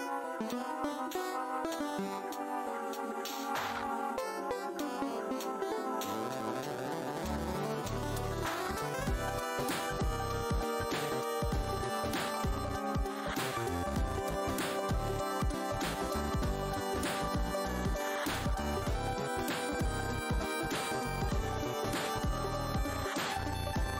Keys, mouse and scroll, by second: 1.8 click, 1.9 w, 4.0 click, 6.9 right click, 8.3 click, 9.3 w, 10.0 click, 14.9 shift+click, 17.5 w, 18.2 w, 18.8 right click, 20.0 click, 20.7 shift+right click, 21.9 click, 22.3 space, 23.0 scroll down 1.